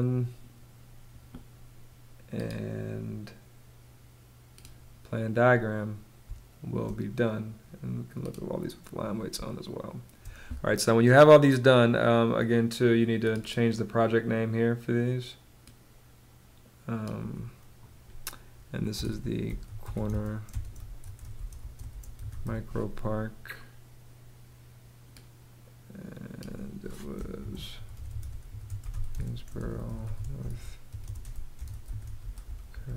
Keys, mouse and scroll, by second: 5.7 space, 8.8 space, 18.2-22.4 typing, 26.6-32.9 typing.